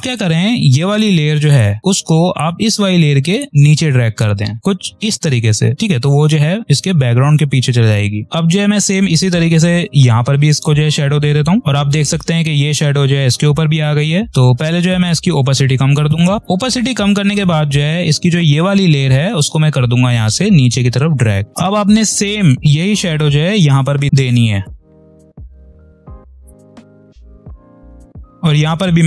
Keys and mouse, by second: 0.9-8.2 drag, 5.8-8.2 drag, 14.3 click, 16.0 3, 16.4 click, 17.4 v, 18.3-21.5 drag, 21.5 space, 22.2 click, 26.1 click, 27.0 3, 27.2 click, 27.5 space, 28.0 click.